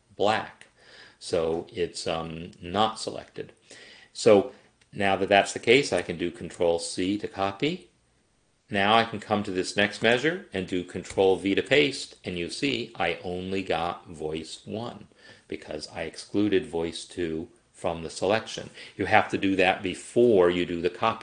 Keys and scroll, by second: 6.0 ctrl+c, 11.2 ctrl+v.